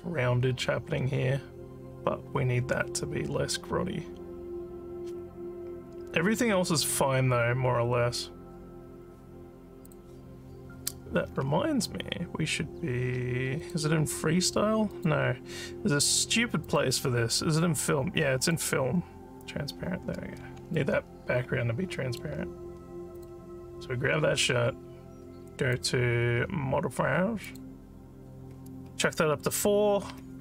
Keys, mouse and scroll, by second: 9.9 click, 13.6 click, 15.0 click, 18.5 click, 20.8-22.2 alt+middle drag, 23.2 click, 25.7 click, 27.5 click.